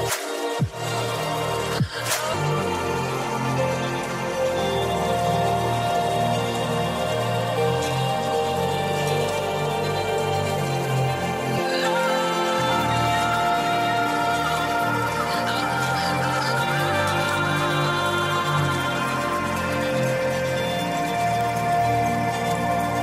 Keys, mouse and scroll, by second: 0.3 click, 2.3-3.3 drag, 4.3 KP_1, 6.3-9.3 drag, 10.6 KP_1, 12.5 click, 12.8 right click, 17.8 click, 19.4 click, 20.4-22.5 scroll up 2.